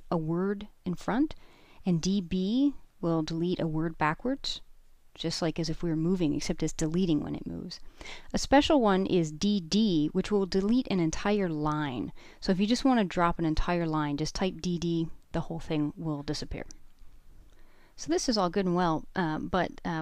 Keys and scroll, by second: 2.9-4.8 typing, 13.1 typing.